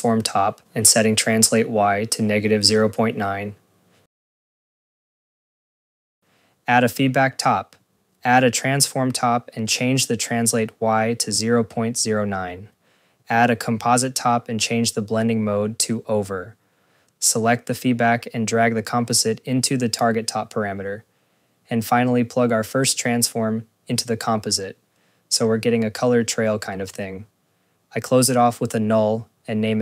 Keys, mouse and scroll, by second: 4.1 click, 6.1 right click, 8.1 click, 8.5 scroll, 8.7 click, 9.0 scroll, 10.2 click, 13.5 click, 14.6 click, 14.9 click, 15.7 click, 23.8 click, 25.5 right click, 26.1 right click, 27.7 click, 29.7 c.